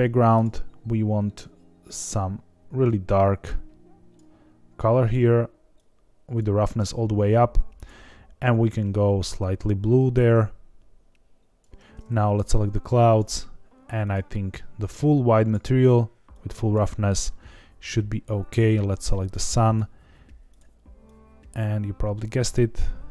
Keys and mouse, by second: 0.3 click, 5.8 click, 12.4 click, 13.0-13.3 drag, 14.0 click, 16.4 click, 18.4 click, 19.8 drag, 20.5 click.